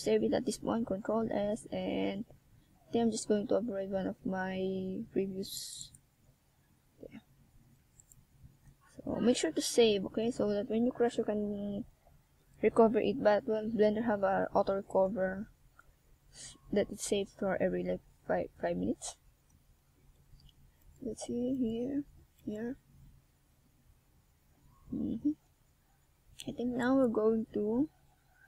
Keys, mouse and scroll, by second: 2.5 click, 3.3 a, 4.3 ctrl+r, 8.2 click, 9.3 a, 9.6 middle click, 11.2 ctrl+r, 14.6 click, 15.6 a, 16.8 ctrl+r, 19.5 click, 20.6 a, 21.4 Tab, 21.9 middle click, 27.1 middle click.